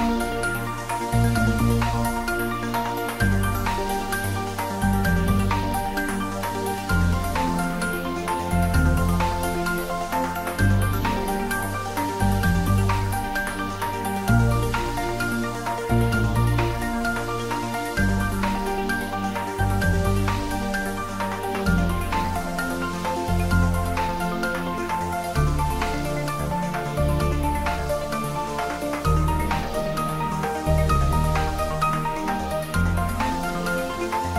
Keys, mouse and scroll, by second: 0.6-1.9 middle drag, 1.9 click, 3.0 ctrl+middle click, 3.7 middle click, 4.3 click, 5.4 ctrl+middle click, 6.0 click, 6.6-8.0 typing, 9.2 click, 9.6-12.4 middle drag, 12.4 ctrl+s, 12.6-14.6 ctrl+middle drag, 15.0 middle click, 15.9 click, 16.6 ctrl+middle click, 17.6 click, 19.9 ctrl+3, 22.5 Tab, 23.1 ctrl+z, 24.1 ctrl+middle click, 24.6 shift+middle click, 24.9 Tab, 25.5 2, 25.8 click, 29.3 Tab, 29.8 ctrl+3, 30.8 Tab, 31.7 shift+middle click, 32.1 Tab, 32.4-33.9 typing, 33.9 click, 34.0 Tab.